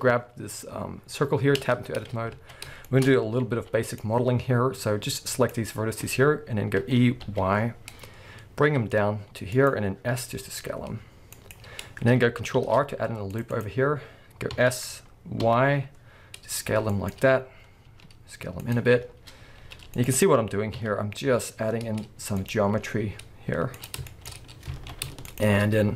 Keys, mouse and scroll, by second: 1.6 Tab, 2.3 alt+a, 2.9-9.5 shift+middle drag, 3.1-3.5 scroll up 2, 3.5 b, 6.8 e, 9.6 click, 10.1 s, 11.5 click, 11.7-12.6 scroll up 1, 12.6 ctrl+r, 13.6 click, 14.5 s, 17.0 click, 17.9 s, 18.7 click, 19.5 ctrl+r, 20.2 click, 20.8 s, 22.5 click, 22.7 s, 23.9 click, 24.1-25.3 shift+middle drag, 24.3-24.7 scroll up 2, 24.7 alt+a, 25.3 alt+shift+click.